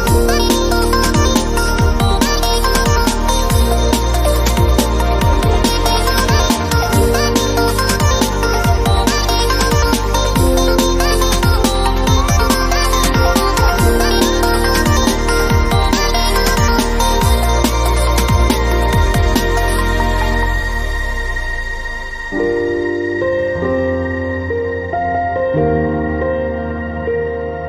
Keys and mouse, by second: 0.0 ctrl+Tab, 0.3 click, 0.7 middle click, 1.5 middle click, 2.4 ctrl+e, 4.1 ctrl+Tab, 4.5 ctrl+l, 5.0 ctrl+Tab, 5.3 click, 5.5 ctrl+l, 5.7 click, 6.1 a, 6.3-6.8 drag, 6.5 ctrl+l, 6.8 ctrl+l, 7.9 click, 8.1 ctrl+l, 8.3 ctrl+l, 9.1 ctrl+KP_Add, 9.7 u, 11.5 g, 11.7 a, 12.1 ctrl+l, 12.3 r, 13.3-14.7 drag, 14.7 ctrl+KP_Add, 16.6 b, 17.1 b, 17.8-20.1 drag, 20.1 middle click, 20.2 click, 20.7 u, 21.1 r, 21.9 g, 22.3 click, 23.0 ctrl+KP_Add, 23.5 u, 24.0-24.4 drag, 24.1 g, 24.4 r, 24.9-25.6 drag, 25.8-26.1 drag, 26.2 ctrl+l, 26.3 r, 26.7-27.5 drag, 27.5 ctrl+l.